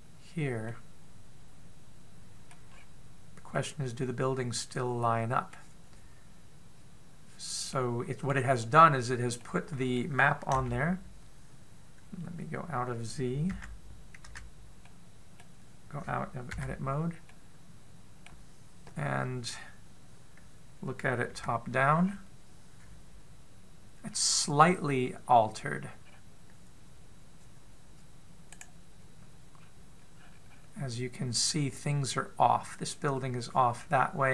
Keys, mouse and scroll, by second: 0.8 click, 1.5 middle click, 3.5 scroll up 4, 4.3 middle click, 8.5 middle click, 9.3-9.7 scroll up 4, 9.7-10.2 scroll down 5, 10.2 middle click, 11.3 a, 14.3 z, 15.0 z, 15.6 middle click, 17.5 Tab, 18.1 middle click, 22.1 KP_7, 22.8-24.9 scroll up 4, 24.9-25.2 scroll down 2, 25.7-26.1 scroll up 2, 26.1 scroll down 2, 26.8-28.1 scroll up 2, 29.4 right click, 30.4-31.0 scroll down 1, 31.0-32.5 scroll up 3.